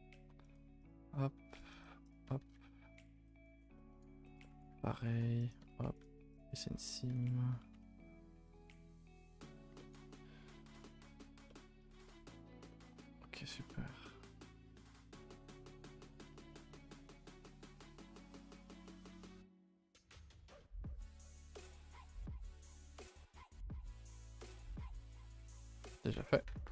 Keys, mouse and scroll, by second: 0.2 alt+click, 0.8-1.5 right drag, 1.5 click, 2.1 right drag, 2.3 a, 2.4 a, 2.4 scroll down 2, 2.6 middle click, 3.1 scroll down 2, 3.2 middle click, 3.9 scroll up 2, 4.2 shift+middle click, 4.9 ctrl+r, 6.3 right drag, 6.5 a, 6.6 a, 6.7 scroll down 2, 6.9 middle click, 7.1 a, 8.5 u, 12.9 a, 13.6 n, 14.5-15.2 drag, 15.2 a, 15.9 n, 16.5 a, 16.7 a, 17.4 Tab, 17.7 a, 17.8 a, 18.5 click, 19.2 click, 23.7 alt+h, 24.0 scroll down 2, 24.2 a, 24.3 a, 24.4 middle drag, 24.6 ctrl+s, 25.0 click, 25.1 Tab, 25.4 a, 25.8 a, 26.4 Tab, 26.6 a.